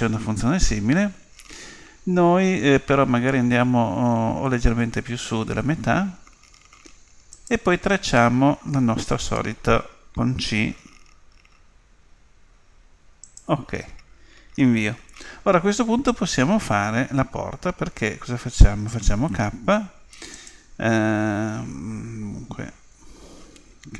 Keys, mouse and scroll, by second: 19.3 k.